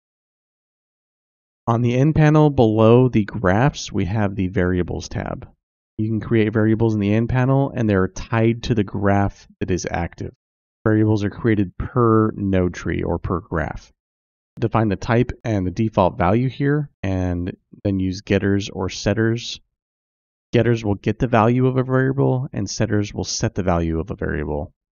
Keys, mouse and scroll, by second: 7.4-24.9 drag.